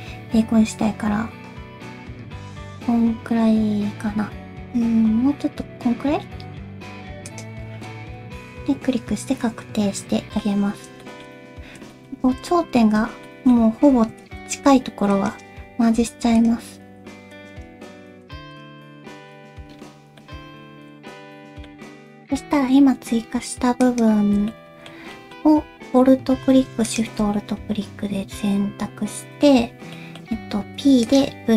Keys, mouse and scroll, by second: 7.8 scroll down 2, 7.9 middle click, 10.5 scroll up 2, 11.0 shift+middle click, 11.3 scroll up 2, 11.9 shift+middle click, 12.1-12.5 scroll up 2, 12.3 alt+z, 12.5 middle click, 13.3 middle click, 13.5 scroll up 2, 14.1 alt+a, 14.4 c, 16.0 m, 16.9 alt+a, 17.1 c, 18.2 m, 18.9-20.0 scroll down 5, 19.1 alt+z, 19.2 c, 20.2 middle click, 21.8 shift+middle click, 22.4 middle click, 23.8 alt+click, 24.5 middle click, 25.1 middle click, 26.9 alt+shift+click, 27.4 middle click, 29.9 middle click, 30.6 p.